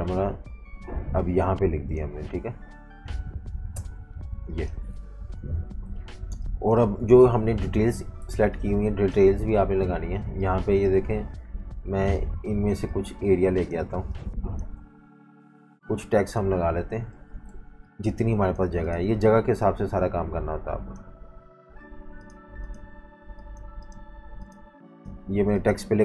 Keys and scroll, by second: 3.7 shift+super+], 4.4 v, 5.4 super+-, 5.5 super+-, 6.2 typing, 7.2 super+-, 8.2 typing, 9.6 v, 13.8-15.3 typing, 17.1 super+z, 17.8 v.